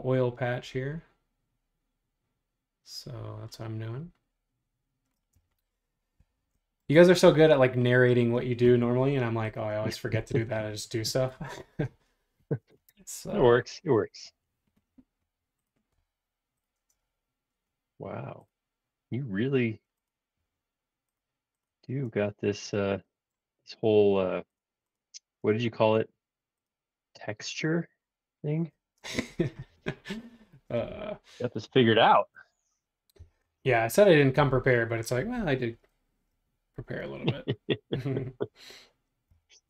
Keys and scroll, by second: 5.3 space, 6.1 space, 22.0 space, 22.8 space, 25.4 space, 33.1 m, 39.4 1.